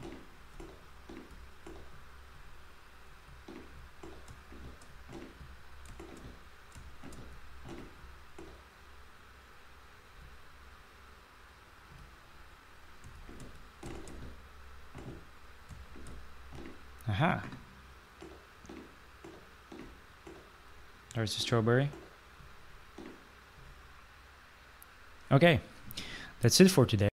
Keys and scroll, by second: 0.0-6.6 typing, 7.7 s, 10.0 q, 11.5-13.1 typing, 15.3-16.0 typing, 17.4-22.3 typing, 23.4 typing.